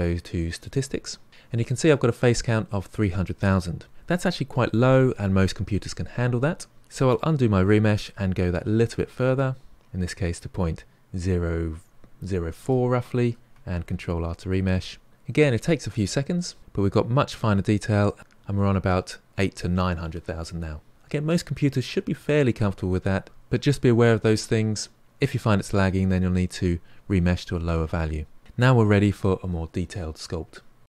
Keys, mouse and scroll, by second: 7.1 ctrl+z, 8.7 shift+r, 16.9-18.2 scroll up 4, 28.4-30.9 middle drag.